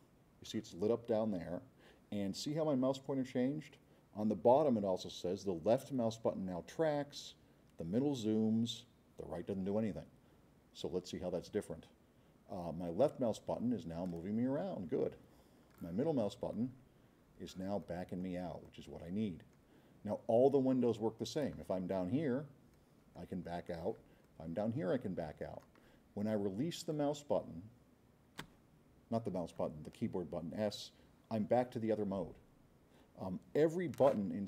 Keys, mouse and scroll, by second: 13.0-15.9 drag, 16.3-17.6 middle drag, 17.8-18.4 middle drag, 18.7-19.6 middle drag, 22.7 middle click, 23.5-23.9 middle drag, 24.3-25.7 middle drag, 31.7 middle click, 31.7 scroll up 2.